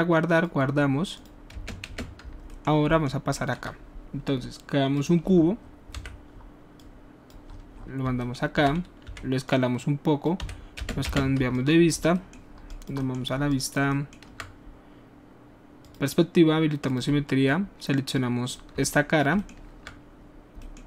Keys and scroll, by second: 1.5 space, 6.0 w, 9.0 alt+r, 10.4 w, 10.8 space, 11.0 space.